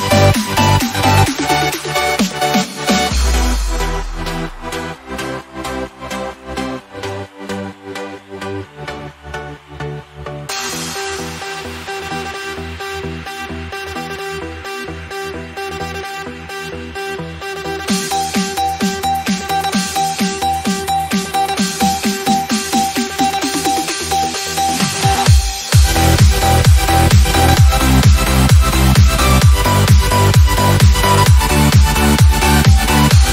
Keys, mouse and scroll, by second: 1.1 ctrl+c, 2.6 ctrl+click, 5.3 ctrl+v, 6.0 click, 7.8 ctrl+c, 8.5 ctrl+click, 11.0 ctrl+v, 11.7 click, 13.7 ctrl+c, 15.1 ctrl+click, 17.5 ctrl+v, 18.2 click, 20.3 ctrl+c, 21.0 ctrl+click, 23.4 ctrl+v, 24.3 click, 26.1 ctrl+c, 26.5 ctrl+click, 26.7 ctrl+click, 27.7 click, 29.1 ctrl+v, 29.8 click, 31.9 ctrl+c, 32.6 ctrl+click.